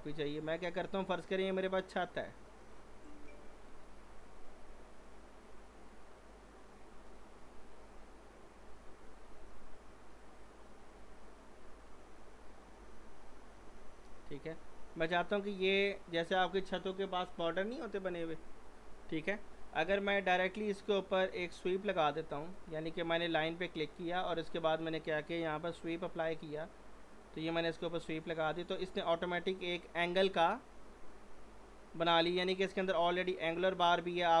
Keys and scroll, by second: 12.3 w, 12.8 s, 21.4 z, 25.7 w.